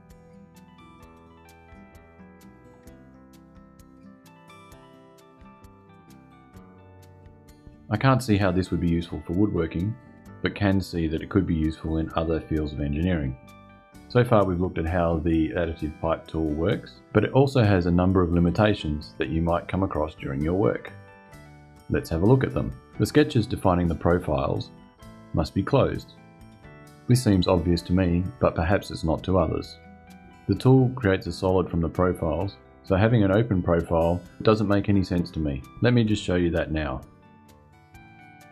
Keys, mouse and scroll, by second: 1.8 shift+middle click, 2.4-7.1 shift+drag, 37.6 click.